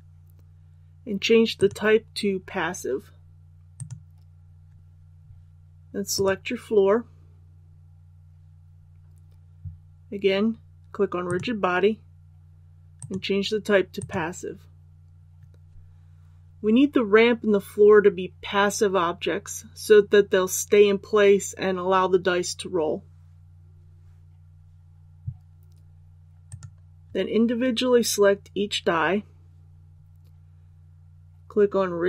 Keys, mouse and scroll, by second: 6.1 right click, 11.2 click, 26.4 right click.